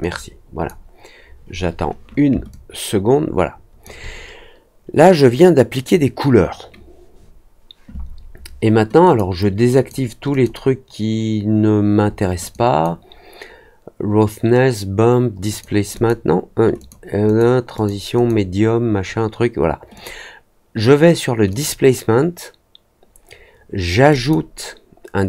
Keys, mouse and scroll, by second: 2.4-3.8 alt+drag, 9.0 click, 9.7 click, 10.2 click, 12.4 click, 15.4 click, 15.9 click, 16.7 click, 17.2 click, 17.7 click, 18.1 click, 19.9 click, 21.4 click, 24.1 click.